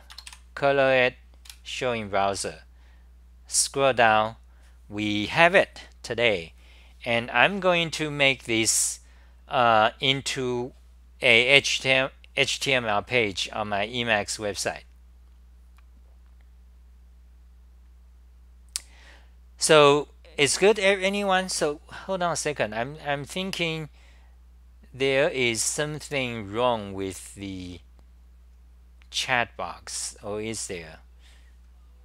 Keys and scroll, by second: 1.5 super+r, 23.5 Delete.